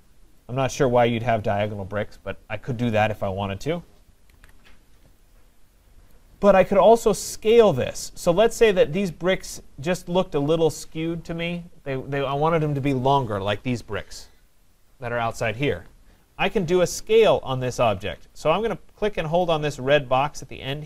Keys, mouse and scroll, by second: 3.6 right click, 4.4 ctrl+z, 6.2 right click, 7.5 middle click, 7.5 middle click, 7.7 middle click, 11.5-12.7 scroll, 16.2 scroll, 16.2-16.8 scroll down 3.